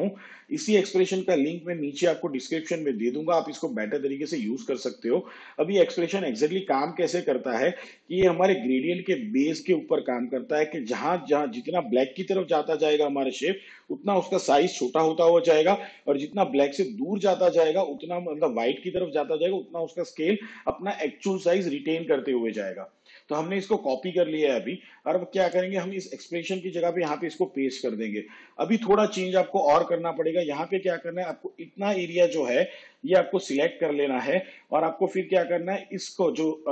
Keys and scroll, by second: 27.0 ctrl+v.